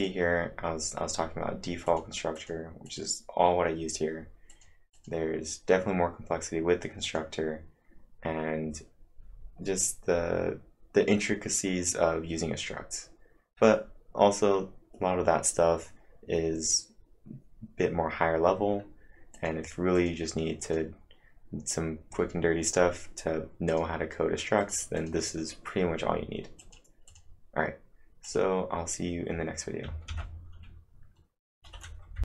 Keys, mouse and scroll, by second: 0.0 click, 1.9 click, 2.3 click, 2.8 click, 4.5 click, 4.9 click, 6.8-7.5 typing, 7.0 click, 19.1-19.8 typing, 19.3 click, 19.9 click, 20.6 click, 23.7 click, 24.6 click, 25.0 click, 26.6 click, 26.8-27.6 typing, 27.1 click, 28.2 click, 30.0 ctrl+`.